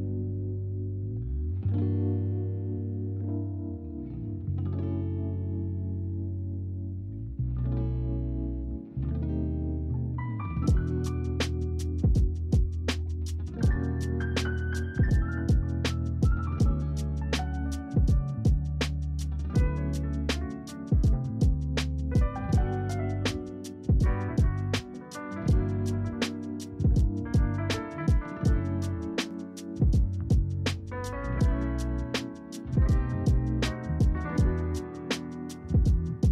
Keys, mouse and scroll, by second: 1.3 click, 2.1-3.9 drag, 3.9 KP_0, 5.4-6.5 drag, 6.5 KP_0, 12.4 click, 14.2 click, 17.8 click, 19.2 click, 20.2-22.0 scroll up 8, 22.0-22.9 shift+middle drag, 22.9-23.5 scroll up 3, 23.5-25.8 middle drag, 25.8-28.2 scroll up 2, 28.2 KP_0, 30.4 scroll down 2, 30.7-31.5 middle drag, 31.5-33.5 scroll up 2, 33.5 click, 34.0 shift+click, 34.9 ctrl+KP_Add, 35.1 ctrl+KP_Add.